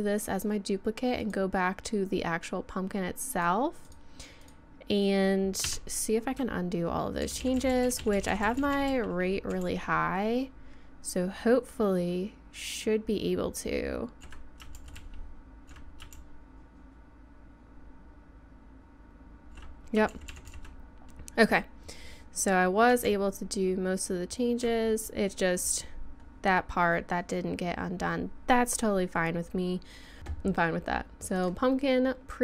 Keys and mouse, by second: 1.2-3.2 drag, 3.3-5.7 drag, 5.7 Tab, 7.2-14.2 ctrl+z, 14.8 ctrl+z, 15.0-15.7 ctrl+z, 16.1-19.5 ctrl+z, 20.1 ctrl+z, 20.3 ctrl+z, 20.5 ctrl+z, 23.1-24.6 ctrl+z, 25.1-28.0 middle drag, 28.6-30.2 middle drag, 30.2 Tab, 31.4-32.4 drag.